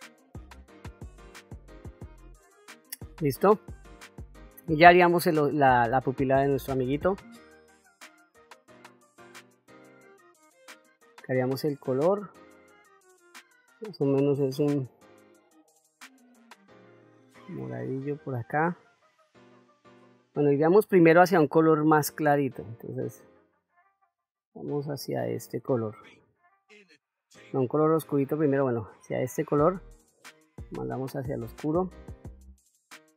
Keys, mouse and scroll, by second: 0.1 ctrl+middle click, 0.2 middle click, 0.6 ctrl+middle click, 1.2 ctrl+middle click, 1.5 ctrl+middle click, 1.9 shift+middle click, 2.0 middle click, 3.2 shift+middle click, 4.0 middle click, 12.1-29.3 drag, 30.4-31.8 drag.